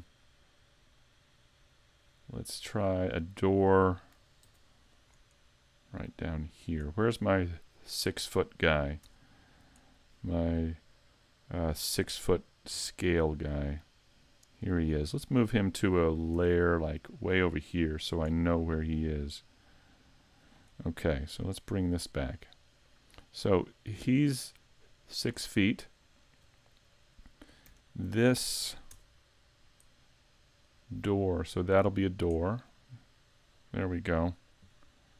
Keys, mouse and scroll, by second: 0.1 middle click, 1.0 middle click, 4.5 ctrl+r, 6.7 click, 7.2-7.8 scroll down 2, 9.1 Tab, 12.7 `, 14.9 right click, 16.4 m, 20.4 click, 21.2 shift+click, 23.5 click, 25.5 scroll up 3, 26.1 shift+middle click, 27.8 alt+right click, 28.9 Tab, 30.6 click, 32.5-33.5 scroll down 1, 33.5-33.9 scroll down 1.